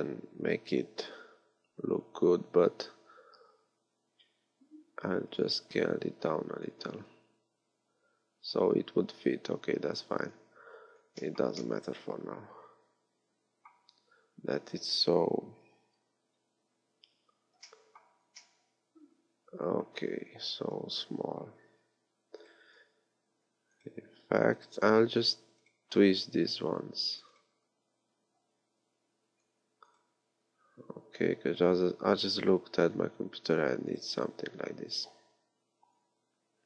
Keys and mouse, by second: 1.1 s, 11.2 middle click, 13.9-17.6 middle drag, 20.9-22.4 middle drag, 21.1 KP_1, 22.4-24.3 right drag, 24.6-26.3 right drag, 29.9 right click, 34.0 right click.